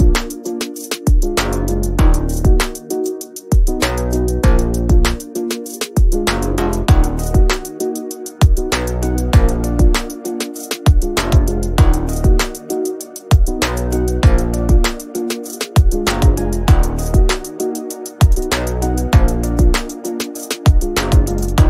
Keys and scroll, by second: 8.6 g, 13.5 s, 14.8 space, 15.0 n, 16.3 Return.